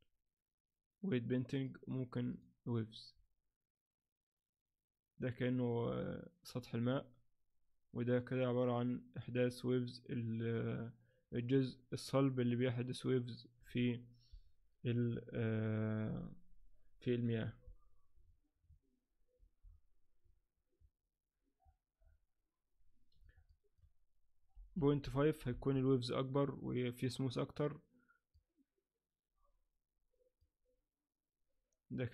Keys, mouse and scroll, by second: 1.5 click, 19.6-20.2 scroll down 1, 20.2 scroll down 3, 21.6-22.0 scroll down 1, 22.7 scroll down 1, 23.5 shift+click, 28.3 click.